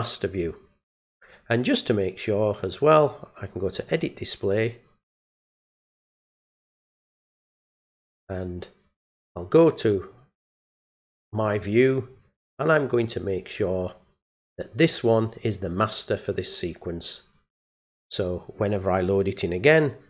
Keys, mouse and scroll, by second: 0.3 click, 2.6 right click, 3.8 click, 9.8 click, 11.1 click, 15.5 click, 17.7 click.